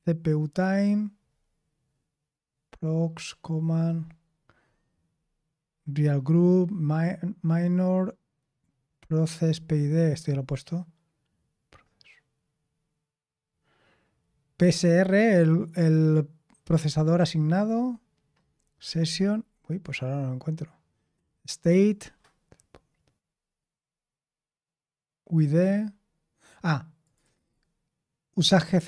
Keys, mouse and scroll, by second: 1.2-2.6 scroll up 1, 2.6-3.7 scroll up 1, 3.7-4.5 scroll up 1, 4.5-5.1 scroll up 1, 5.1-6.2 scroll up 1, 6.2-7.5 scroll up 1, 7.5-9.9 scroll up 1, 9.9-17.5 scroll down 1, 17.5-18.4 scroll down 1, 18.4-19.3 scroll down 1, 19.3-20.3 scroll down 1, 20.3-21.7 scroll down 1, 21.7-23.3 scroll down 1, 23.3-25.3 scroll down 1, 25.3-27.0 scroll down 1, 27.0-28.8 scroll down 1.